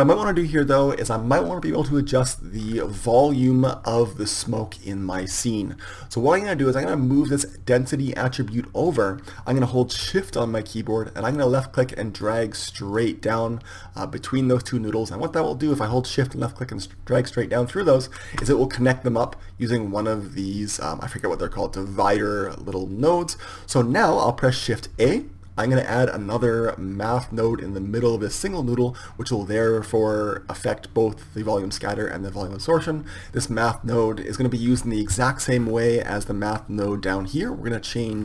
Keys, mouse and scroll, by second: 4.4-7.5 middle drag, 7.5-14.2 drag, 23.0-25.2 drag, 25.2 shift+a.